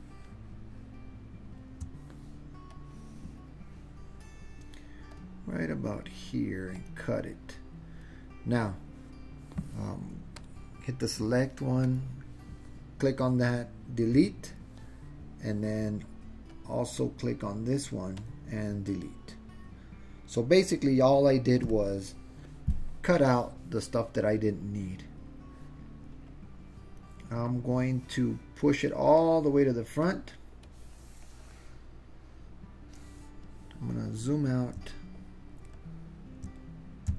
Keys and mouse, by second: 2.8-4.3 drag, 5.2-6.2 drag, 6.8 click, 10.4 click, 11.9 click, 14.3 Delete, 16.7-17.8 drag, 18.2 click, 21.8 Delete, 26.4-27.1 drag, 27.6-29.2 drag, 30.7-33.7 drag, 34.9-35.6 alt+drag, 35.7-36.4 alt+middle drag.